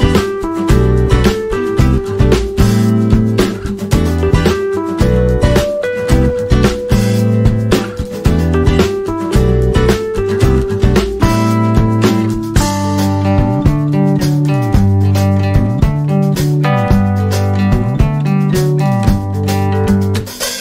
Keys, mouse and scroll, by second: 3.4 click, 5.5 click, 8.0-8.8 alt+scroll up 3, 9.9 alt+scroll up 1, 10.2 click, 11.0 space, 11.1 click, 11.3 space, 12.0 alt+scroll down 1, 13.1-14.5 drag, 14.5 scroll up 1, 15.4-15.8 scroll up 1, 16.6 alt+scroll up 1, 17.4 scroll up 1, 17.7 click, 20.3 click.